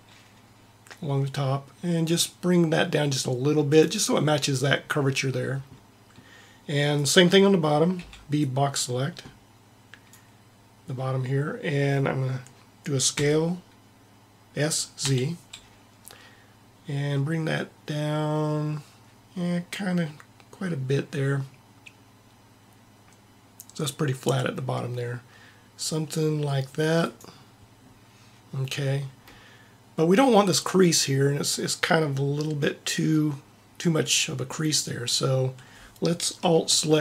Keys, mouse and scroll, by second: 6.9-8.4 drag, 7.9 b, 10.1 b, 13.1 s.